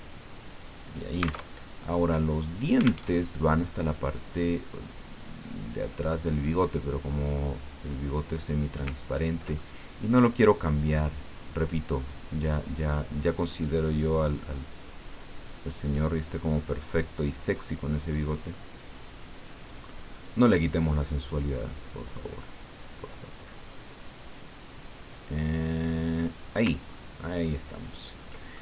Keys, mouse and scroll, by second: 1.6 alt+Tab, 3.1 alt+Tab, 3.9 click, 5.6-8.8 drag, 9.1 ctrl+scroll up 1, 9.5-11.1 ctrl+middle drag, 12.3 click, 12.9-14.7 drag, 15.4-17.1 drag, 17.7-20.4 drag, 21.2-26.6 drag, 26.9 ctrl+scroll down 2, 27.5-28.0 ctrl+scroll down 2, 28.5 ctrl+middle click.